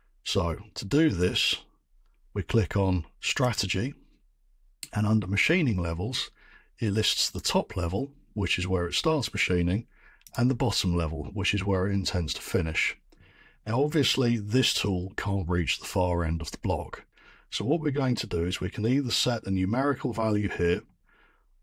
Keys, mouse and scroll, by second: 3.5 click, 7.3 click, 8.6 click, 10.3 click.